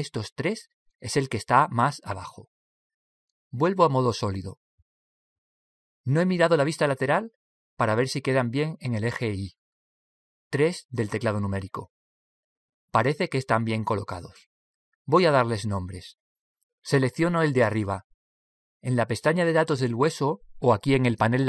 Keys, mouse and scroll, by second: 1.3-5.2 right drag, 5.6 z, 11.6 KP_3.